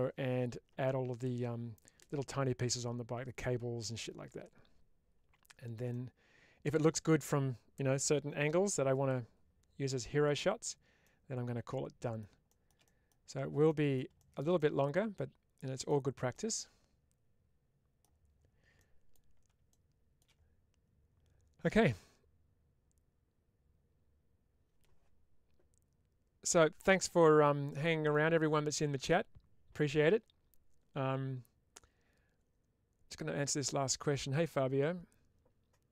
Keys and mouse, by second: 5.8 middle click, 11.0-12.1 middle drag, 12.8 middle click, 13.7 middle click, 14.5-15.8 middle drag, 16.3-17.9 middle drag, 18.6-19.0 middle drag, 27.6 middle click.